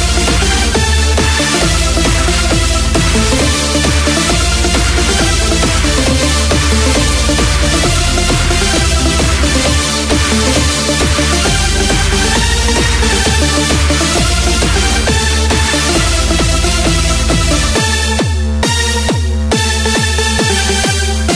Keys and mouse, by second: 0.7 click, 3.4 click, 6.1 click, 8.1 click, 13.4-16.1 drag, 16.8 click, 18.8 click.